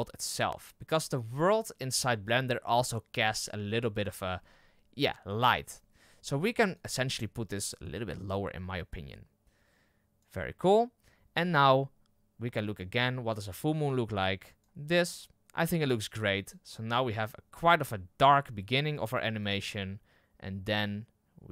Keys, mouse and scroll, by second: 7.9 click, 11.7-12.1 scroll down 3, 12.8-21.5 drag.